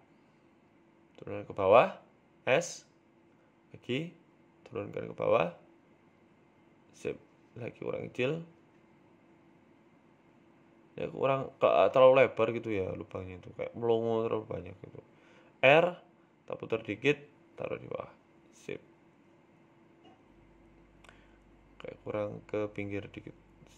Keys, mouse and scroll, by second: 1.3 middle click, 1.3-2.1 scroll down 5, 1.9 shift+middle click, 1.9 scroll up 1, 2.9 g, 4.3 s, 5.1 KP_1, 5.5-5.9 scroll up 5, 5.8 shift+middle click, 6.9 s, 7.7 g, 8.9 s, 9.9 shift+middle click, 9.9-11.7 scroll up 8, 10.6 shift+middle click, 11.1 Tab, 11.7 scroll up 1, 11.9 shift+middle click, 12.8 click, 13.4 click, 13.8 s, 15.3 Tab, 15.5-16.0 scroll down 3, 16.0 r, 18.6 g, 20.3 s, 22.2 z, 22.6 scroll down 3, 22.9 shift+middle click, 23.2 scroll down 2, 23.6-23.7 scroll up 3.